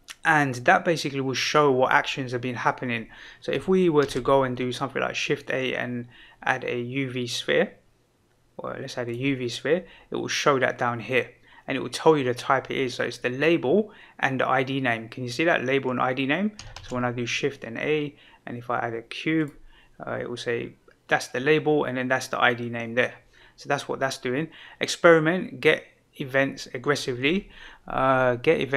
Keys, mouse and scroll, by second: 4.0 shift+a, 16.7 shift+a.